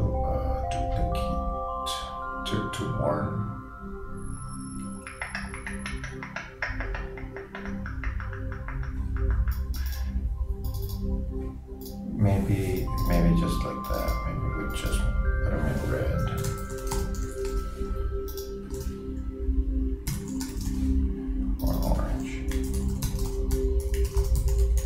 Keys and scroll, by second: 15.9-18.8 typing, 20.7 shift+r, 23.0-24.8 typing.